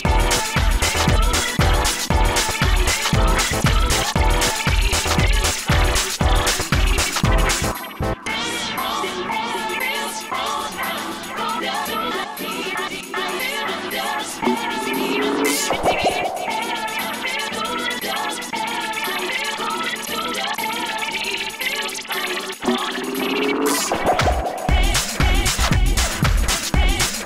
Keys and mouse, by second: 1.7 f, 3.7 f, 4.0 f, 9.7 f, 13.4 click, 15.2 drag, 16.2-20.2 drag, 22.9 shift+f, 23.4 f.